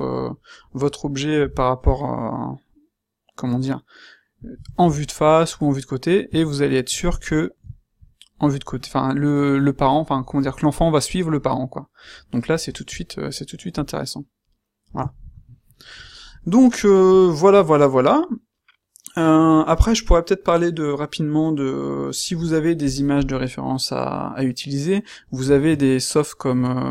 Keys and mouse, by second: 1.3 g, 6.2 q, 15.6-17.0 middle drag.